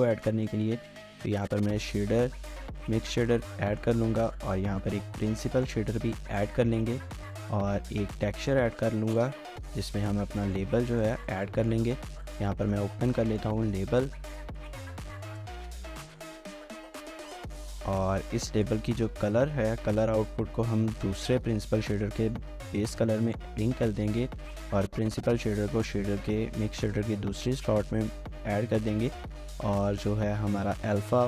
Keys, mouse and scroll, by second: 0.0-0.6 typing, 0.5 double click, 3.1 double click, 3.6 middle click, 4.2 typing, 6.8 middle click, 7.6 middle click, 8.2 a, 10.4 middle click, 11.3 double click, 23.1 middle click.